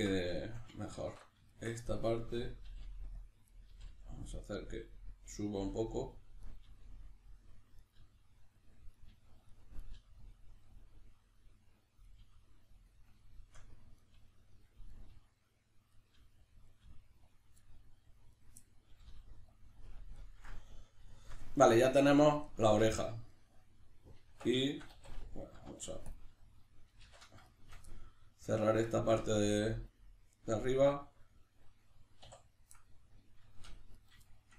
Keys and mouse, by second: 0.0-1.9 middle drag, 0.0 b, 1.0 alt+q, 1.9 right click, 2.6 g, 3.3 click, 3.5 right click, 3.7 g, 4.9 click, 5.6 g, 6.2 click, 6.4 right click, 6.6 g, 7.4 click, 7.8 right click, 7.9 g, 8.7 click, 8.9 right click, 9.1 g, 9.5 click, 9.7 right click, 9.9 g, 10.3 click, 12.0 right click, 12.2 g, 12.9 click, 13.3 shift+middle click, 13.9 right click, 14.1 g, 14.6 click, 14.9 right click, 15.1 g, 15.7 click, 15.9 right click, 16.1 g, 16.5 click, 16.7 right click, 16.8 g, 17.4 click, 17.6 middle click, 18.4 right click, 18.6-19.6 middle drag, 18.9 g, 19.6 click, 19.8-34.0 middle drag, 22.6 Tab, 24.3 Tab, 25.0 a, 32.2 2, 34.0 right click, 34.3-34.5 shift+middle drag.